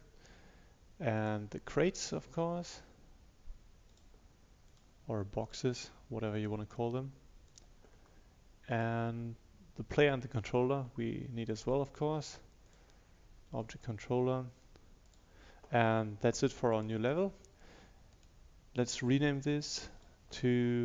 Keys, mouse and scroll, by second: 10.0 click, 18.3 right click, 20.0 click.